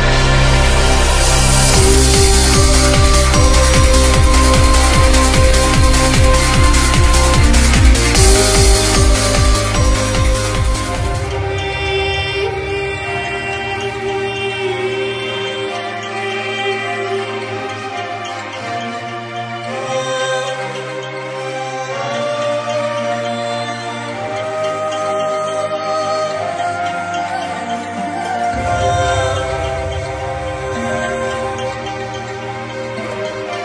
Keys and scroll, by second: 15.8 ctrl+z.